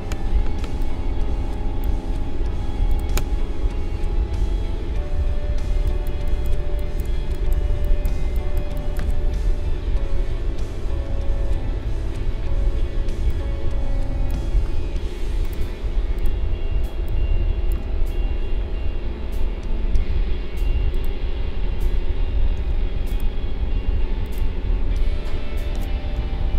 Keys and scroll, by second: 5.6 space, 16.7 space, 22.5 a, 26.1 i.